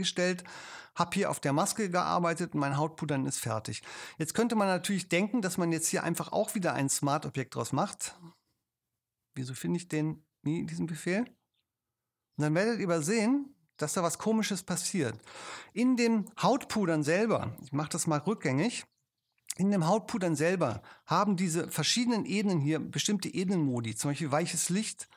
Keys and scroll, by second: 17.9 alt+super+z.